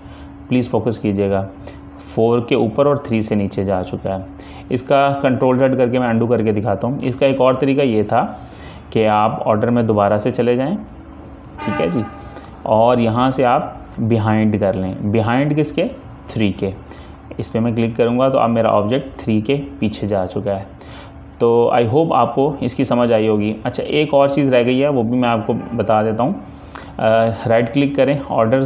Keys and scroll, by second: 5.3 Page_Up, 5.5 ctrl+z, 6.1 ctrl+z, 23.2 z, 24.5 z.